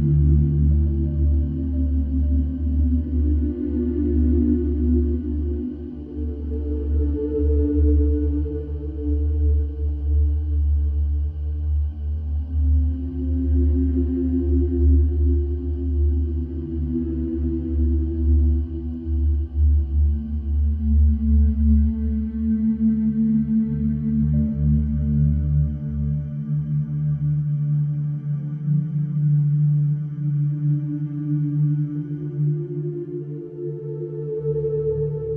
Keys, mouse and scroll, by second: 0.2-0.9 scroll, 2.1 scroll, 2.6-3.1 scroll, 4.1-5.1 scroll, 7.5-7.8 scroll, 8.4 scroll, 11.1 middle click, 12.7 click, 15.1 click, 17.4 click, 18.8 click, 20.6 click, 20.8 click, 22.8 click, 24.5 middle click, 25.4 middle click, 25.5 middle click, 25.9 middle click, 26.0 middle click, 26.7 right click, 29.2 click, 33.8 click, 34.7 middle click.